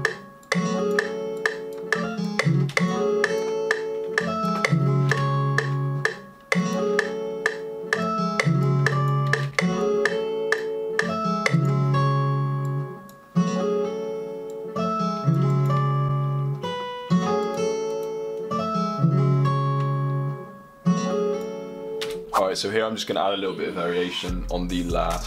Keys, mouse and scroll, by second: 11.5 click.